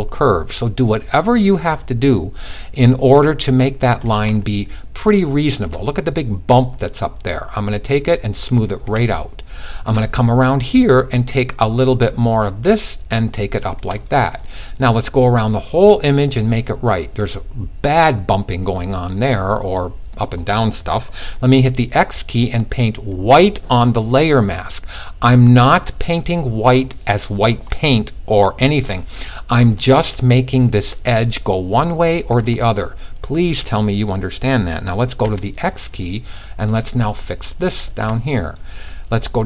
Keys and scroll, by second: 2.0 x, 21.0 x, 34.7 x.